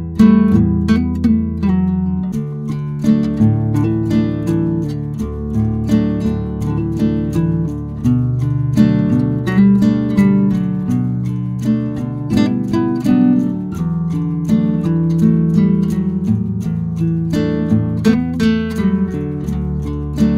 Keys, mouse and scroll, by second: 12.2-12.7 middle drag, 12.9 space, 13.7-14.2 middle drag, 16.2 space, 16.8 space, 17.4 space, 18.5-18.9 middle drag.